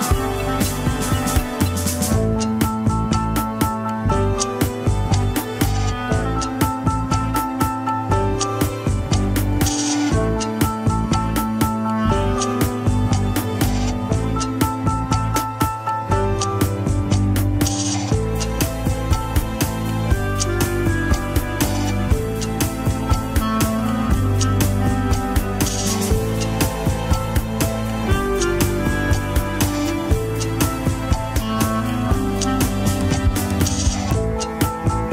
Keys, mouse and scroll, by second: 0.2 Tab, 2.0-4.0 typing, 3.6 Tab, 3.8 scroll up 2, 5.2 click, 5.5 Tab, 5.8 r, 7.5 scroll down 3, 8.0 KP_3, 8.8 Tab, 9.0 alt+z, 9.8 alt+z, 10.3 KP_1, 11.4 ctrl+s, 20.9 click, 21.6 Tab, 22.1 g, 22.5 alt+z, 23.3 g, 24.9 alt+z, 25.2 g, 27.7 shift+s, 28.4 Tab, 28.7 click, 29.1 Tab, 29.5 scroll up 1, 29.6 r, 31.4 ctrl+Tab, 31.6 alt+z, 31.8 scroll down 2, 32.2 alt+z, 32.8-33.2 scroll up 2, 33.2 click, 33.6 x, 34.1 click, 34.5 Tab, 34.9 r.